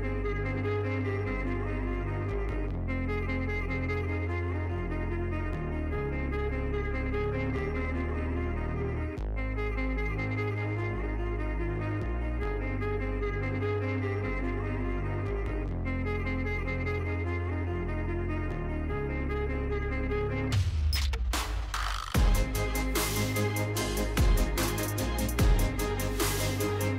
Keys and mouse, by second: 0.6 ctrl+z, 3.0 Tab, 3.5 click, 4.5 Tab, 5.0 click, 7.3 click, 8.1 x, 9.4 Tab, 10.5 ctrl+z, 13.3 x, 14.8 Tab, 15.3 click, 16.3 Tab, 17.8 click, 18.2 x, 19.6 Tab, 20.6-21.7 middle drag, 21.9 Tab, 24.4 Tab, 25.2 KP_Decimal, 26.3 click, 26.8-26.9 middle drag.